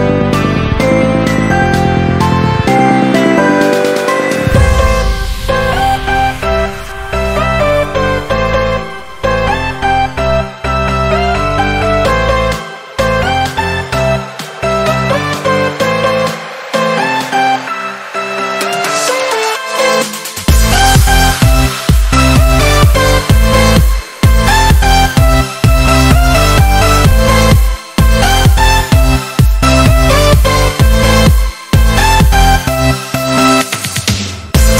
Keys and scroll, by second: 3.4 ctrl+z, 3.5 ctrl+z, 8.5 ctrl+z, 11.3 ctrl+-, 11.6 ctrl++, 13.8 ctrl+-, 21.0 ctrl+z, 22.1 ctrl+z, 26.4 ctrl+z, 27.9 ctrl+z, 31.4 ctrl+z.